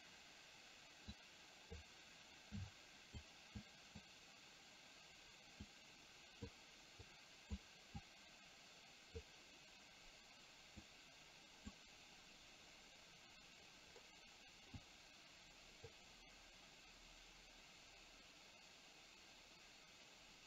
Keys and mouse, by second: 1.3 click, 2.6 click, 3.6 click, 5.6 click, 7.1 click, 8.0-9.4 drag, 10.9 click, 14.9-16.0 drag.